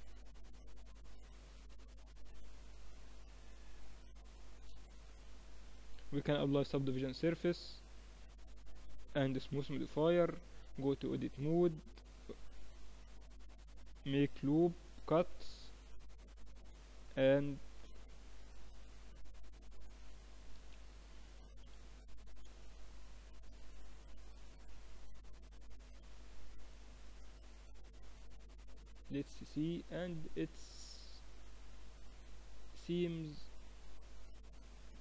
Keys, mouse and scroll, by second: 0.6 s, 5.1-6.3 middle drag, 6.3 ctrl+2, 6.3-8.4 drag, 9.1-11.0 drag, 9.4 t, 9.9-11.0 right drag, 10.4 Tab, 11.4 ctrl+r, 14.3 ctrl+r, 16.9 middle click, 20.2 KP_3, 21.3 KP_1, 22.2 z, 23.4 Tab, 25.1-26.3 middle drag, 26.3 click, 26.5-32.2 middle drag, 28.0 z.